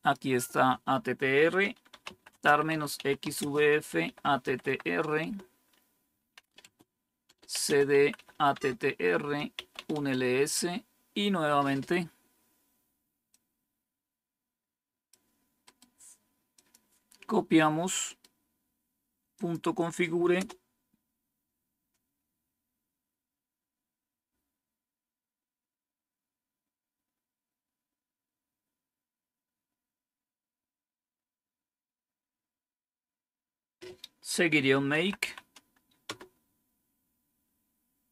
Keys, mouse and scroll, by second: 1.6-11.7 typing, 13.2-15.1 drag, 15.6 right click, 16.5 click, 18.0 right click, 19.3 click, 20.6 Return, 34.4-35.6 typing, 36.0 Return.